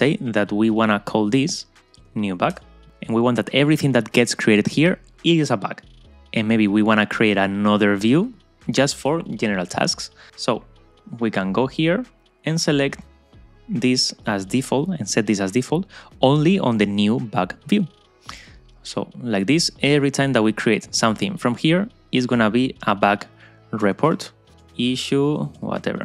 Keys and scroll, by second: 2.6 Return.